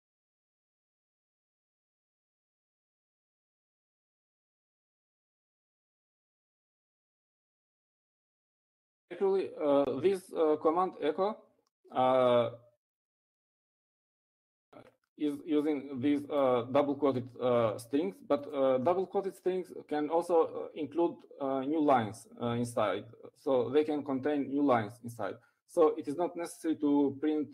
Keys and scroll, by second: 3.1-6.3 typing, 8.4-9.2 typing.